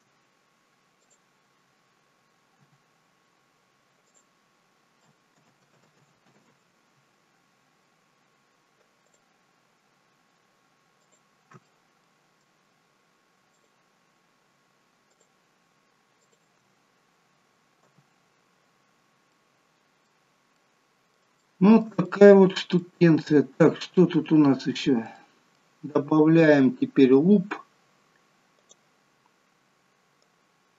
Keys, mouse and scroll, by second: 1.0 click, 2.6 g, 5.3 ctrl+z, 5.9 ctrl+z, 6.4 ctrl+z, 8.2-8.6 scroll up 1, 9.1 click, 11.0 shift+click, 11.7 middle click, 13.6 shift+click, 15.1 shift+click, 16.2 shift+click, 17.9 f, 18.4-19.2 scroll down 7, 19.3 middle click, 20.6 middle click, 21.4 shift+middle click, 21.6 shift+middle click, 22.1 middle click, 22.8 middle click, 23.5-24.0 scroll up 2, 24.0 middle click, 25.2 middle click, 28.6 click, 30.3 click.